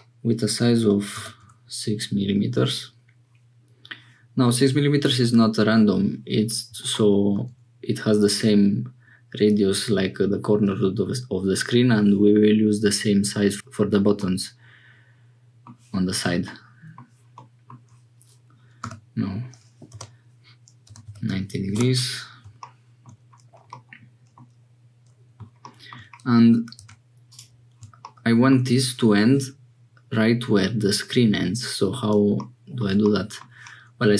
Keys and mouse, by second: 14.2-15.7 middle drag, 16.4 middle click, 17.4 middle click, 18.8 r, 23.8 middle click, 26.8 2, 33.1 click.